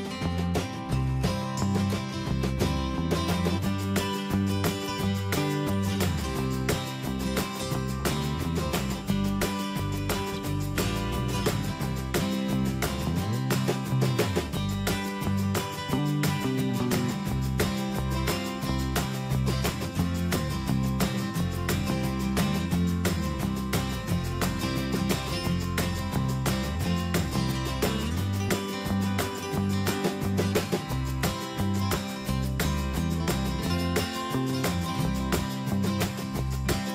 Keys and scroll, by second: 3.6 ctrl+v, 4.4 ctrl+a, 12.4 ctrl+a, 16.0 ctrl+=, 19.0 BackSpace, 22.7 ctrl+z, 24.2 Return, 25.6 Delete, 27.4 ctrl+a, 28.4 ctrl+Return, 32.1 Escape, 35.7 ctrl+a.